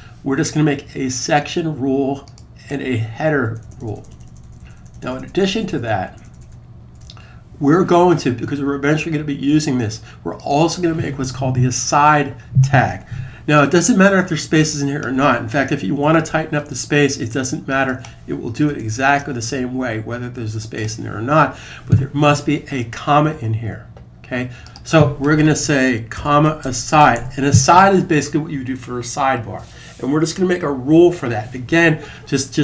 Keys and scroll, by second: 25.7-27.4 typing.